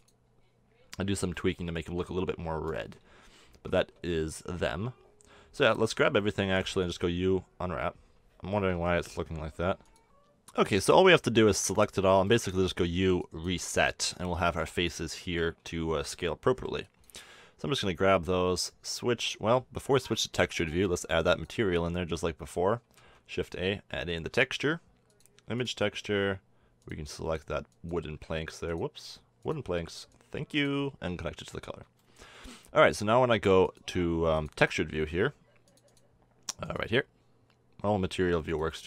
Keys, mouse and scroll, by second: 1.3-3.0 middle drag, 3.5 Tab, 3.9 a, 5.5 a, 5.7 a, 6.4 u, 8.7 KP_1, 9.5 u, 10.0 Tab, 11.2 Tab, 11.6 a, 12.3 u, 15.6 a, 16.5 b, 19.1 click, 20.0 click, 23.0 shift+a, 26.8-32.0 drag, 32.1 middle click, 37.0 click, 38.5-38.8 drag.